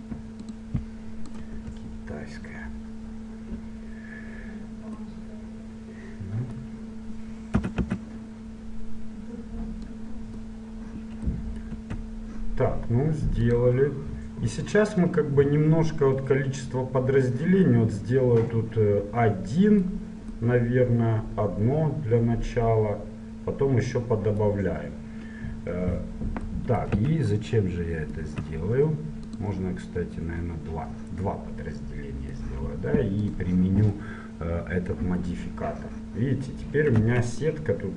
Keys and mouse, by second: 1.7 KP_1, 2.7-4.9 middle drag, 5.1 click, 7.7 a, 7.9 a, 9.9-11.9 drag, 11.9 Tab, 13.6-16.5 drag, 17.9 middle click, 19.5-20.6 middle drag, 22.1-24.1 middle drag, 27.0 z, 28.4 z, 29.4-31.3 drag, 31.3 middle click, 33.2 click, 34.1-35.4 middle drag, 37.1 Tab.